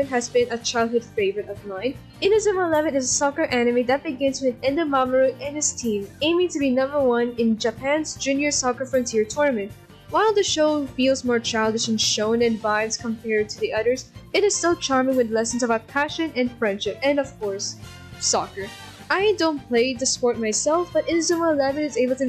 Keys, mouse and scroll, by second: 13.8 ctrl+-, 14.0 right click, 14.5 right click, 15.2 ctrl+z, 15.9 right click, 17.6 b.